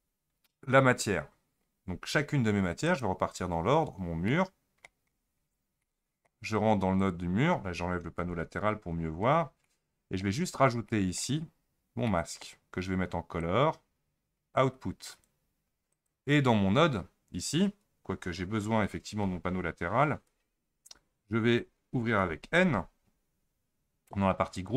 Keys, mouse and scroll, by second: 2.9 click, 4.3 middle click, 5.2-5.7 scroll up 7, 5.8-7.0 middle drag, 7.0 click, 8.2 n, 8.7-9.7 scroll down 17, 9.7-10.5 middle drag, 10.5-10.9 scroll up 2, 10.9-11.4 middle drag, 11.4-12.1 scroll up 1, 12.1-13.4 middle drag, 13.4 click, 15.9 click, 19.2 Tab, 20.2 Tab, 22.2 n, 24.5 click.